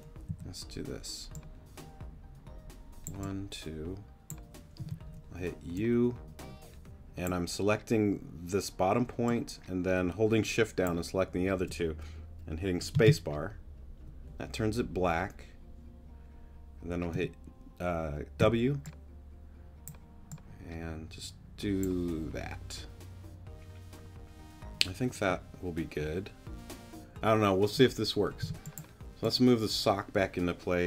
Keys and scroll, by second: 0.3 a, 4.8 u, 12.9 space, 17.1 w, 18.4 w, 28.4 t.